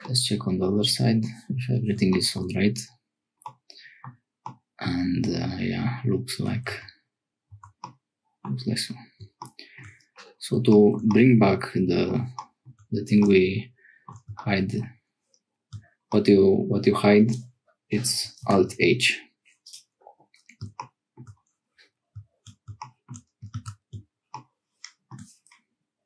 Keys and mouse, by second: 0.0-1.3 middle drag, 3.4 middle click, 4.4-6.5 middle drag, 6.7 Tab, 7.5 Tab, 7.8 middle click, 11.2-12.2 middle drag, 13.2 shift+middle click, 18.4 alt+h, 23.5 ctrl+s.